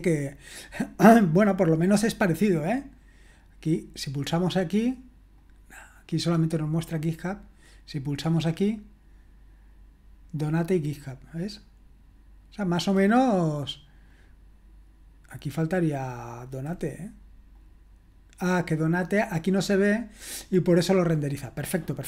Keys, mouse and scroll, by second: 4.2 click, 11.6 click, 14.1 click, 16.2-16.7 scroll down 2, 16.7-17.1 scroll up 2, 17.6 click.